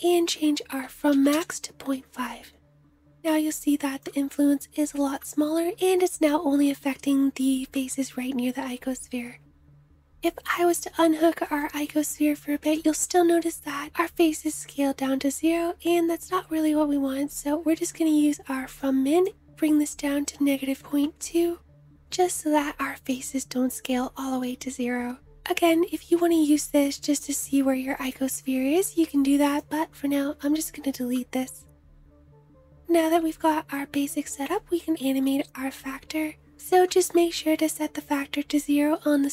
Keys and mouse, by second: 30.6 Delete, 33.4 middle click, 36.5 middle click.